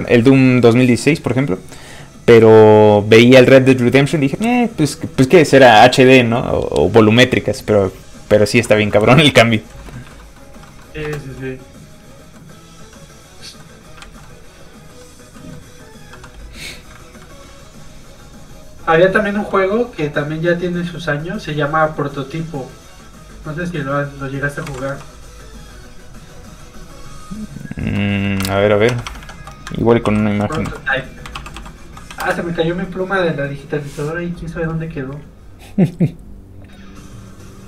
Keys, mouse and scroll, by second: 9.7-10.0 scroll down 1, 10.0 middle click, 10.1 shift+middle click, 10.4 shift+scroll up 2, 10.7 middle click, 11.1 space, 11.4 middle click, 14.0 alt+shift+z, 14.4 middle click, 17.4 click, 24.6 KP_2, 24.7 KP_4, 25.1 Return, 25.3 click, 28.1 middle click, 28.4 alt+Tab, 29.7 ctrl+Tab, 30.1 ctrl+t, 30.4-32.1 typing, 32.2 Return, 35.3 click.